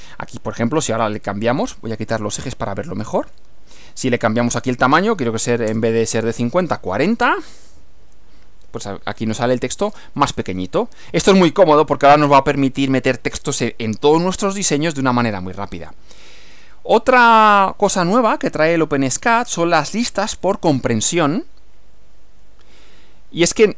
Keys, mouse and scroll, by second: 3.3 click, 4.5 click, 5.7 BackSpace, 5.8 4, 7.1 F5, 8.7-9.1 scroll down 2, 9.1 scroll up 2, 9.8-10.1 scroll up 2, 10.3 scroll down 2, 16.5 click, 17.3 click, 20.2 click.